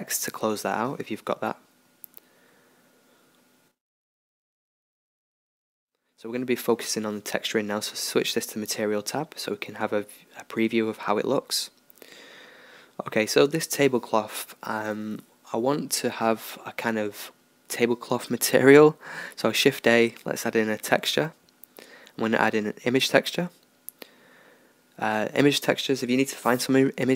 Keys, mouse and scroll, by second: 8.4-11.5 middle drag, 11.5-15.6 drag, 15.6 shift+a, 25.6-27.0 middle drag, 27.0 click.